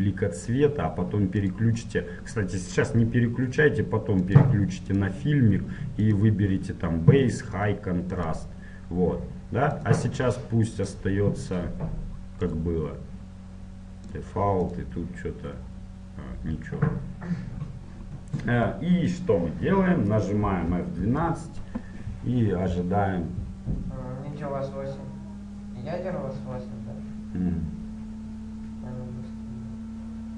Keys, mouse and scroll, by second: 1.6-3.8 drag, 4.4-8.6 drag, 10.0-14.6 drag, 14.8-21.2 drag, 21.2 F12, 27.6-30.3 middle drag.